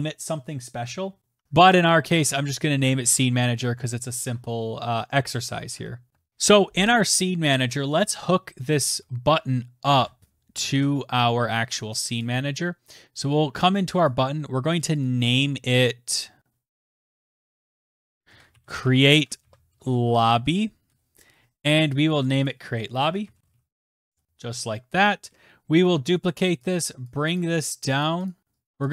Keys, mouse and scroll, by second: 10.8 alt+Tab, 12.3 click, 14.2 click, 15.0 click, 15.1 click, 18.1-24.6 typing, 22.4 click, 22.5 click, 25.9 ctrl+d, 27.1 shift+click, 27.6 click, 28.1 shift+click, 28.3 click, 28.7 click.